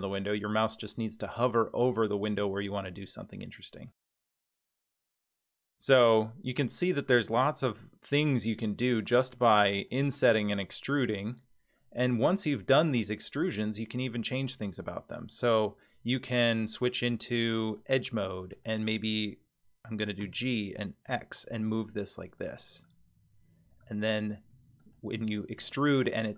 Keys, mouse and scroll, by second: 2.3 e, 4.6 middle click, 7.1-9.1 middle drag, 9.7 click, 10.3 e, 11.8-15.4 middle drag, 17.8 click, 18.5 click, 20.2 g, 22.8-23.8 middle drag, 24.5 3, 24.8 click, 25.4 middle click.